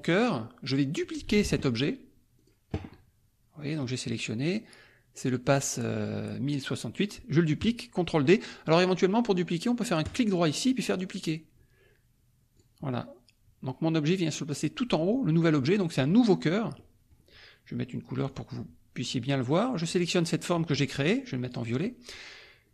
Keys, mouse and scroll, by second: 0.1-1.2 drag, 1.2 ctrl+z, 2.3 click, 3.8 click, 10.0 right click, 12.5 click, 16.7 middle click, 18.2 click, 19.8 click, 21.4 click.